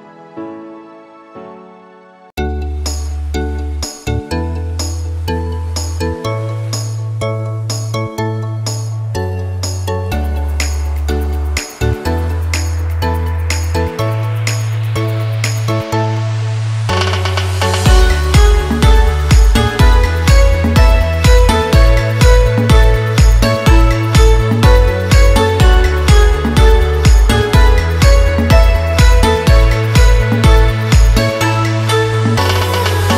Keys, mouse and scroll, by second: 3.0 click, 10.9 click, 13.8-24.2 drag, 24.2 t, 24.6 click, 27.5-30.7 typing, 27.6 click, 27.7 click, 32.2 click.